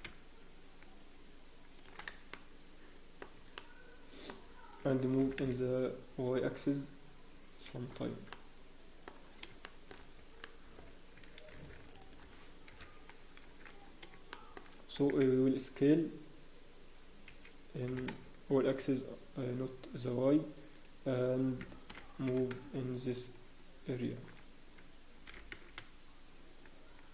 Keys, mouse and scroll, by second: 0.0 g, 2.1 Tab, 2.3 middle click, 3.3 Tab, 3.5 middle click, 4.3 scroll up 1, 5.2 g, 8.0 Tab, 8.0-9.3 scroll down 4, 8.3 middle click, 9.3 scroll down 1, 9.6 shift+middle click, 9.9 scroll down 1, 10.2 Tab, 10.4 middle click, 11.5 ctrl+r, 12.7 scroll up 1, 12.7 KP_1, 13.4-13.8 shift+scroll down 4, 13.6 shift+z, 14.3 shift+middle click, 14.6-15.0 scroll down 4, 15.0 shift+4, 18.1 shift+4, 22.5 g, 24.4 scroll up 1, 25.2 g.